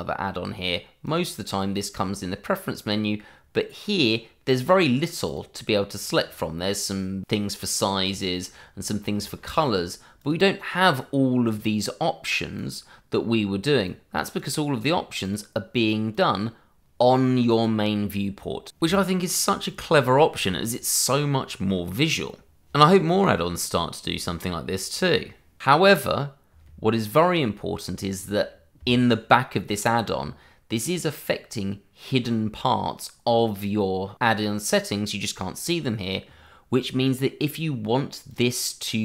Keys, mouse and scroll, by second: 1.0 click, 3.2-4.0 scroll down 1, 4.6 click, 5.8 scroll down 1, 6.7-8.0 scroll up 1, 8.0 click, 8.5-9.1 scroll down 1, 9.1-10.0 scroll up 1, 10.2 click, 10.8-11.4 scroll down 1, 11.4 click, 20.1 click, 36.8 click.